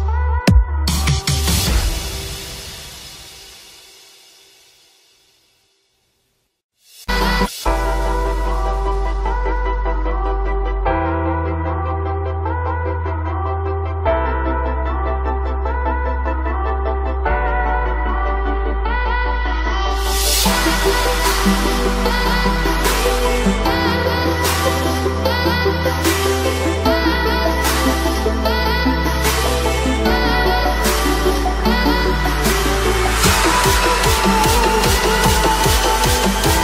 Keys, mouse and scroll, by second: 16.5-33.4 drag, 33.4 right click, 33.8 click, 34.7 right click, 35.1 click, 35.7 right click, 36.0 click.